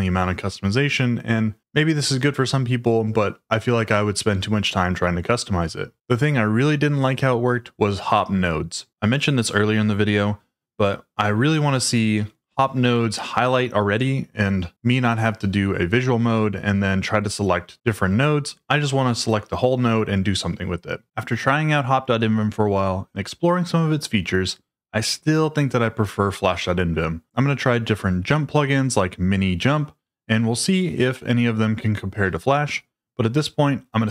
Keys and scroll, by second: 7.7-9.1 typing, 9.6 Return, 10.8 y.